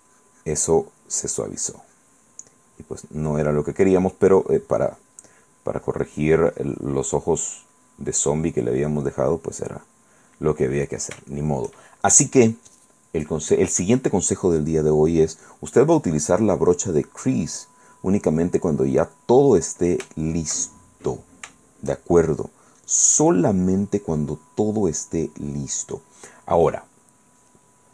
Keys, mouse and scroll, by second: 2.7 click, 3.4 middle click, 4.7 click, 5.5 click, 7.6 click, 8.4 click, 9.5 click, 10.6 middle click, 11.1 shift+middle click, 11.7 shift+middle click, 12.9 middle click, 14.1 click, 14.9 click, 20.3-22.3 shift+drag, 22.6-24.9 middle drag, 24.9 click, 25.8-27.9 middle drag.